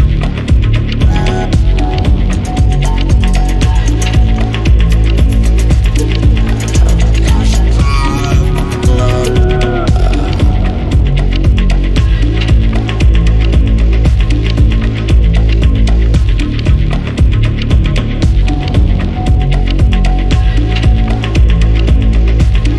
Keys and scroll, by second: 11.3-11.9 typing, 15.2 Escape, 19.7 Escape, 21.2 7, 21.9 Return.